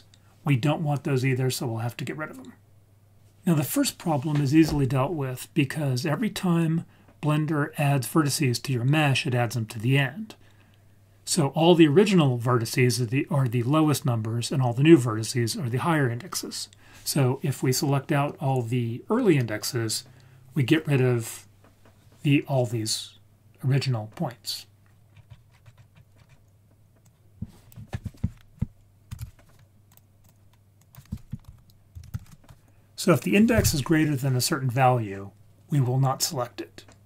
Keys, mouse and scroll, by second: 25.2-25.5 scroll down 5, 25.5-25.9 scroll up 5, 25.9 scroll down 1, 26.2-26.9 scroll up 1, 26.9 scroll up 1, 27.0-28.6 drag, 30.2-32.3 drag, 33.0 click.